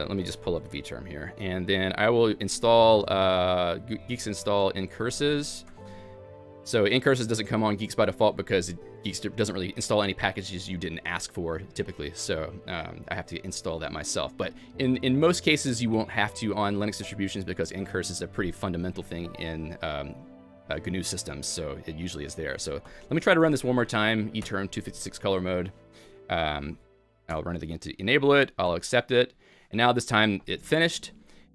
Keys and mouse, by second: 18.4-21.8 typing, 20.6 click, 21.3 click, 21.5 Escape, 21.5 ctrl+e, 21.5 click, 21.8 Escape, 21.8 ctrl+e, 21.8 ctrl+alt+j, 21.8 Return, 21.8 alt+x, 21.9 click, 22.4 click, 22.8 q, 23.4 alt+x, 24.4 Return, 25.6-28.7 typing, 25.8 click, 26.9 click, 29.7-30.8 typing, 30.0 click, 30.5 click.